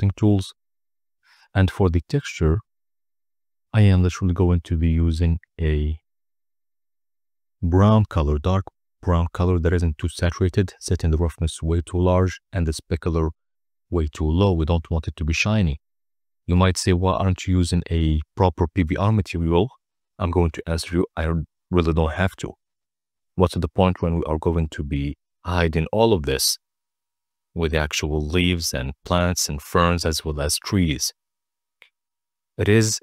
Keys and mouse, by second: 0.6 click, 1.8 z, 4.9 click, 11.5 click, 12.5-15.3 drag, 22.4-23.1 drag, 24.0-24.7 drag, 25.3 click, 26.6 click, 28.3 z, 32.4 click.